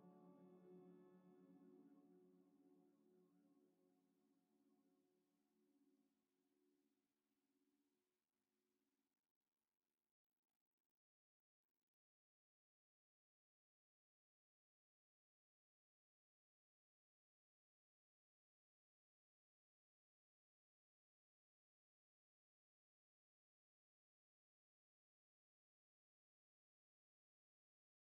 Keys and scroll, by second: 13.2 n, 16.2 a.